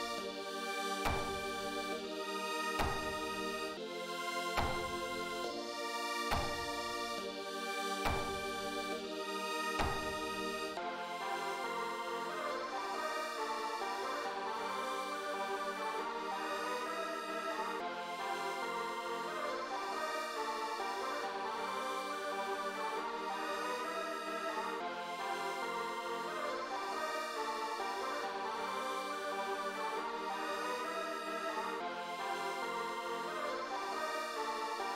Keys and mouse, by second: 1.5 click, 2.4 click, 3.1 click, 4.0 click, 5.2 click, 10.3 click, 17.5 click, 19.1 click, 19.4 click, 22.0 click, 23.0 click, 23.3 click, 25.3 click, 26.7 click, 29.9 click, 32.5 click.